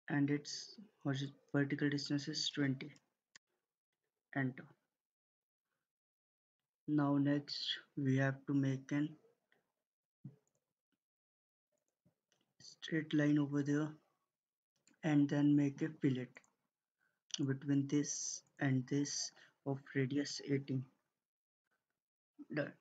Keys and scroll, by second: 2.2-2.9 typing, 3.3 Return, 5.3 Escape, 13.2 Escape, 19.8-20.6 typing, 21.5 Return.